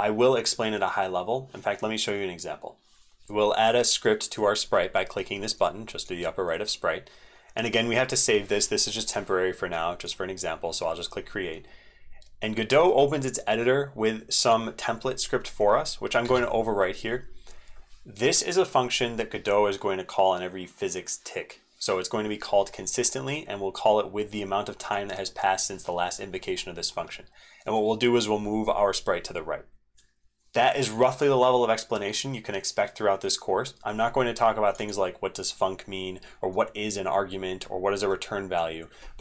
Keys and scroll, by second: 2.9 ctrl+v, 16.2 ctrl+v, 28.8 ctrl+v.